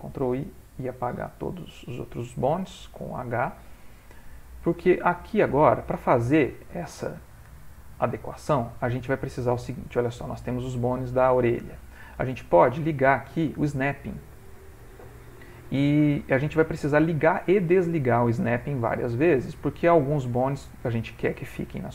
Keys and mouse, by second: 1.2 h, 2.3 middle click, 4.9 click, 5.5 ctrl+middle click, 6.2 shift+middle click, 6.6 ctrl+middle click, 6.9 middle click, 10.4 click, 12.9 click, 13.6 shift+middle click, 13.8 shift+middle click, 14.0 shift+middle click, 15.5 shift+middle click, 15.6 middle click, 17.6 middle click.